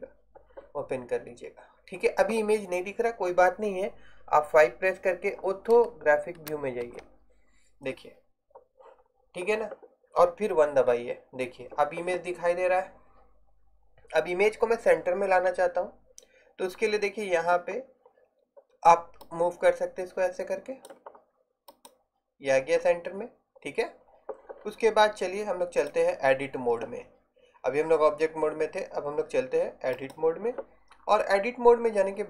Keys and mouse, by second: 6.9 KP_5, 10.8 KP_1, 31.1 middle click.